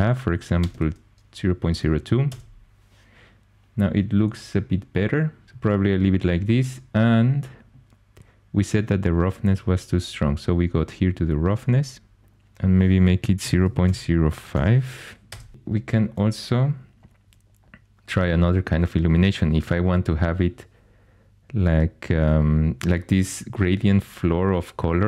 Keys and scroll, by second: 0.6 BackSpace, 0.7 BackSpace, 2.3 Return, 13.2-14.5 typing, 15.3 Return.